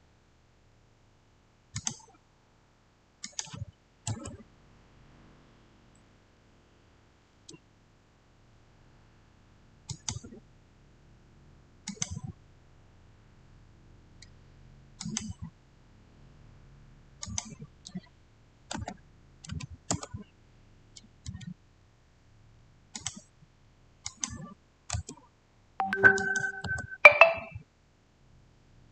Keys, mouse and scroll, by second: 1.6 click, 4.0 Return, 9.7 Return, 9.8 click, 11.7 click, 14.9 click, 14.9 click, 17.1 click, 18.7-19.3 typing, 19.8 Return, 22.8 Return, 22.8 click, 24.8 Return, 26.1 click, 26.5 Return, 28.8 click.